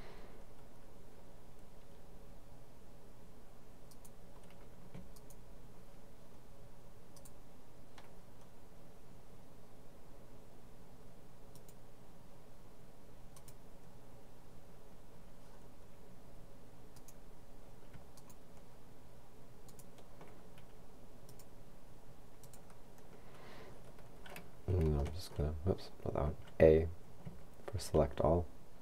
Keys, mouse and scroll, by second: 4.0 right click, 5.2 shift+right click, 7.2 right click, 11.6 click, 13.4 click, 17.0 right click, 18.1 shift+right click, 19.8 right click, 21.3-23.5 drag, 25.1 shift+a, 27.3 a.